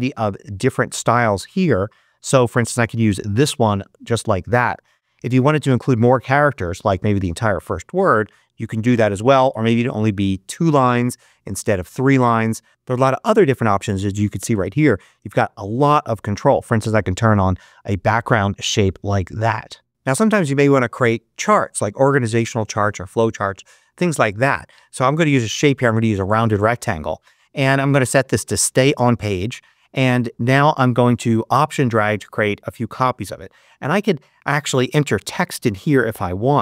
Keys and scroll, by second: 34.7-35.5 typing, 35.8 super+a, 36.0 super+BackSpace.